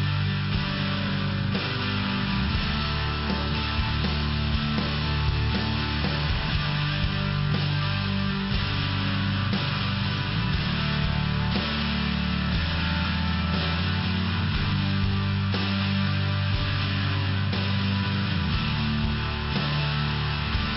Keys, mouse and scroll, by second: 0.3 click, 2.6 click, 3.0 click, 4.0 click, 8.2 click, 9.2 click, 10.9 click, 11.0 click, 12.7 click, 13.1 click, 13.4 click, 13.7 click, 14.0 click, 14.5 click, 14.9 click, 15.0 click, 15.5 click, 16.8 click.